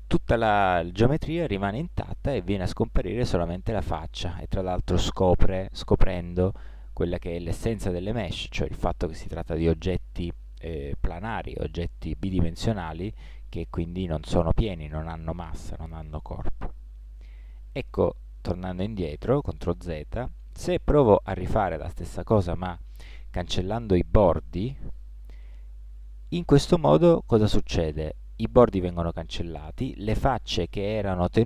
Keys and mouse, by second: 4.1-5.1 middle drag, 5.4 middle click, 6.2 middle click, 6.8-8.1 middle drag, 8.6-10.5 middle drag, 14.7 middle click, 16.2 middle click, 17.2 ctrl+z, 21.4 x, 26.6-28.4 middle drag.